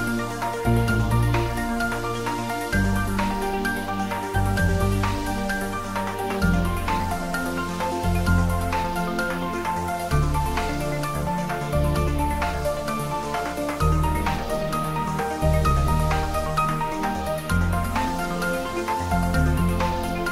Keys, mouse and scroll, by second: 1.3 click, 2.2 g, 3.0 click, 3.4 r, 3.8 click, 4.6 ctrl+s, 5.0 click, 5.6 ctrl+s, 5.8-8.0 ctrl+middle drag, 8.4 ctrl+middle click, 8.5 ctrl+middle click, 8.9 ctrl+s, 10.8 click, 11.6 r, 12.6 click, 14.1 click, 14.6 ctrl+middle click, 15.5 ctrl+z, 16.2 click, 17.2-18.9 typing, 17.8 click, 19.4 click, 20.2 s.